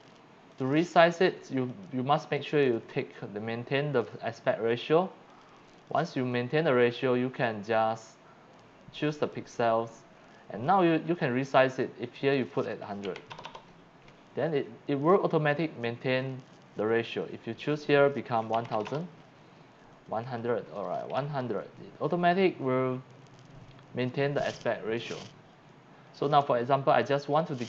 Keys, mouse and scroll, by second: 0.5 click, 1.7 click, 2.4 click, 5.3 click, 9.2 click, 12.2 click, 13.0 KP_8, 13.3 KP_0, 17.2 click, 18.5 KP_1, 18.7 KP_0, 18.9 KP_0, 20.2 click, 21.2 KP_0.